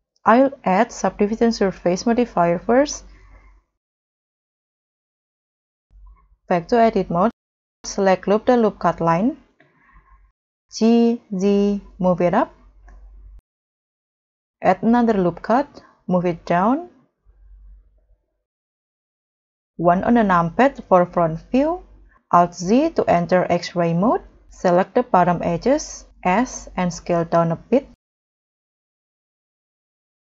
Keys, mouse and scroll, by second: 4.3 scroll up 1, 4.6 middle click, 9.1 scroll up 1, 10.7 g, 14.7 ctrl+r, 17.5 scroll down 2, 17.8 middle click, 19.8 middle click, 19.9 1, 20.6 scroll down 1, 22.0 scroll, 22.0 alt+z, 26.9 s, 30.1 double click.